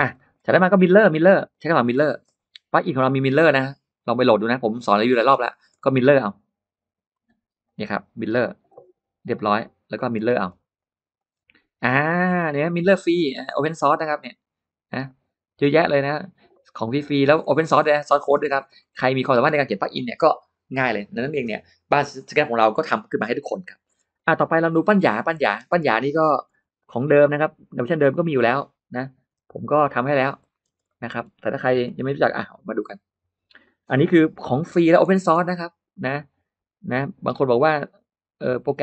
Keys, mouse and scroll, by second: 0.0 middle click, 0.5 middle click, 1.3 click, 1.8 middle click, 2.1 scroll down 1, 4.7 click, 5.0-6.0 scroll up 2, 5.6 middle click, 7.0 click, 7.5 click, 8.1 click, 9.3 click, 9.7 middle click, 9.9-10.6 scroll up 2, 10.1 space, 10.6 click, 11.0 click, 12.8 click, 13.1 middle click, 14.9 click, 15.4 click, 15.9 click, 16.9 click, 17.3 middle click, 17.4-18.3 scroll down 2, 17.6 space, 17.7 click, 18.0 middle click, 18.3 middle click, 18.3-18.8 scroll up 2, 23.7-24.5 scroll up 2, 24.1 middle click, 24.5 middle click, 24.5-25.2 scroll down 2, 25.2 middle click, 25.5-25.9 scroll up 1, 26.0 click, 26.5 r, 26.8 click, 28.0 click, 29.1 p, 29.4 click, 30.2 click, 30.5 space, 30.6-30.9 scroll up 1, 30.7 middle click, 30.9-31.3 scroll down 2, 31.7 l, 32.3 click, 33.3 click, 34.5 middle click, 34.7 scroll up 1, 34.8 scroll down 1, 35.0 Escape, 36.8 click, 37.2 middle click, 38.2 click.